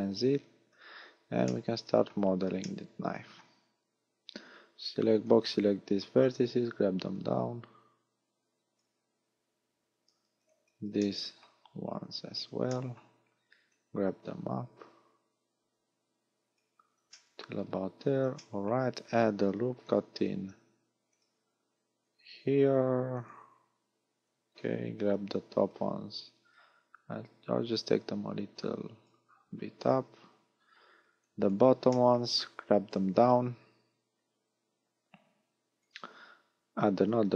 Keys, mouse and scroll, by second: 0.3-1.0 scroll down 6, 1.0 a, 1.5 shift+middle click, 2.6 shift+middle click, 5.2 b, 6.0-6.8 scroll up 1, 6.8 scroll up 1, 7.2 click, 9.8 a, 10.3 b, 11.0 shift+middle click, 11.8-12.4 scroll up 5, 12.8 shift+middle click, 13.7 click, 17.2 shift+middle click, 17.5 scroll down 6, 18.4 shift+middle click, 20.1 ctrl+r, 23.3 click, 24.2 a, 25.2 b, 26.6 click, 29.4 scroll up 2, 30.0 a, 30.9 b, 32.0 shift+middle click, 33.0 click, 37.0 ctrl+r.